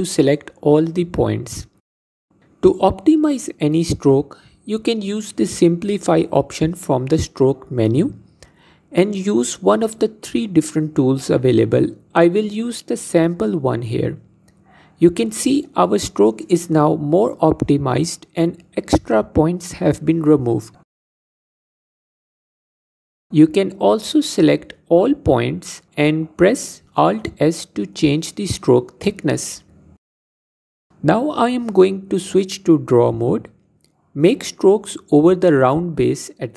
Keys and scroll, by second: 23.8 l, 25.5 alt+s, 31.0 l, 31.4 alt+s, 34.3 ctrl+Tab.